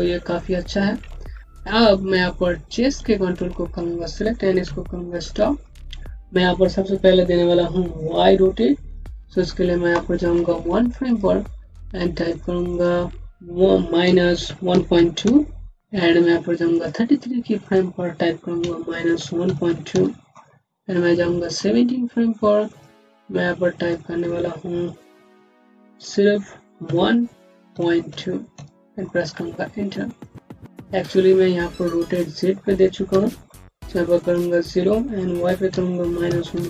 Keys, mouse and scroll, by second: 1.0 scroll up 1, 3.2 click, 5.1 v, 5.7 scroll down 1, 11.0 click, 13.9 KP_Subtract, 14.3 KP_1, 14.6 KP_Decimal, 14.8 KP_2, 15.1 KP_Enter, 16.6 KP_Enter, 18.5 KP_Subtract, 19.0 KP_1, 19.3 KP_Decimal, 19.5 KP_2, 19.8 KP_Enter, 21.3 click, 28.8 KP_Enter, 30.1 click, 31.9 click, 33.0 KP_0.